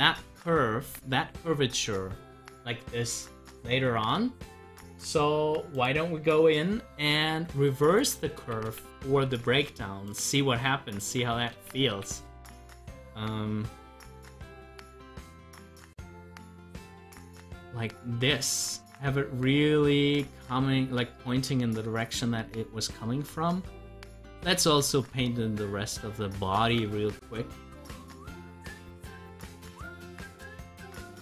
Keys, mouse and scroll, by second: 0.1-4.5 drag, 5.7 click, 11.6 ctrl+z, 13.5 click, 13.7 double click, 15.2-22.2 drag, 23.5 click, 24.5 ctrl+z, 26.6 ctrl+z, 27.5 scroll up 1, 28.0-31.0 middle drag.